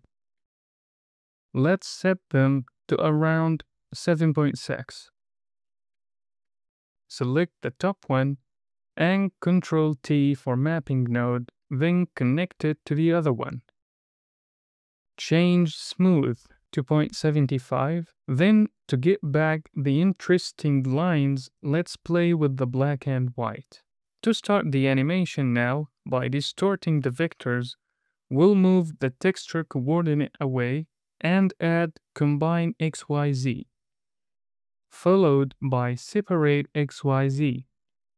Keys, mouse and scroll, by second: 0.0 click, 1.6 middle click, 2.6-3.1 scroll up 3, 3.1 middle click, 3.6-5.0 drag, 5.4-6.5 drag, 7.2 click, 8.9 ctrl+t, 9.9 c, 11.2 click, 11.5 middle click, 12.1 click, 12.8 drag, 15.3-17.0 drag, 18.1 click, 22.8-23.4 scroll up 5, 23.6 middle click, 25.1-25.6 scroll down 2, 25.6 middle click, 26.4 click, 29.2 click, 31.1 shift+a, 33.8 click, 34.7 shift+a.